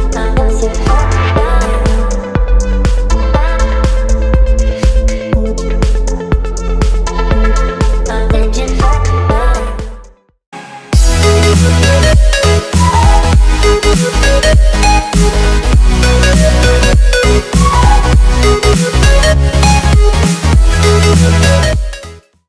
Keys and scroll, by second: 1.1 v.